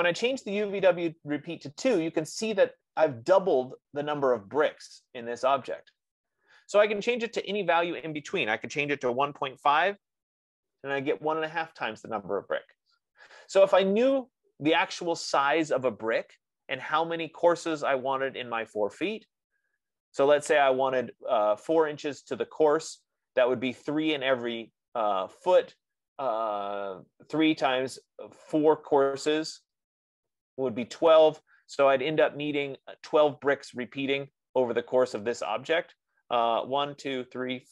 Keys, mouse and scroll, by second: 0.7 F15, 8.0 click, 8.5-12.9 drag, 8.8-10.2 typing.